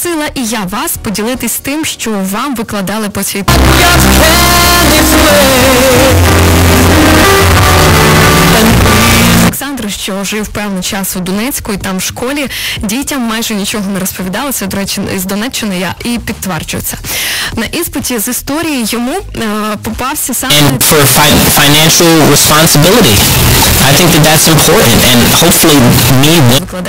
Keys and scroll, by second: 9.5 Page_Down.